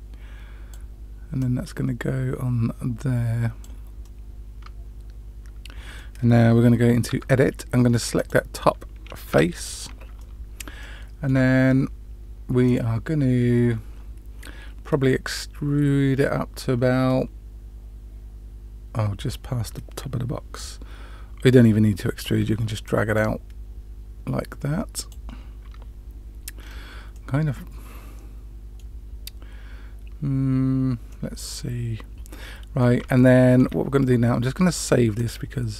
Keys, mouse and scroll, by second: 1.3-3.6 drag, 4.0-6.0 middle drag, 7.0 Tab, 8.1 click, 9.3 3, 9.5 click, 10.1-10.6 middle drag, 10.8-11.3 shift+middle drag, 22.8-25.0 drag, 26.6-27.1 scroll down 1, 27.1-28.8 middle drag, 31.0-32.8 middle drag, 33.1 shift+middle click, 35.1-35.7 drag.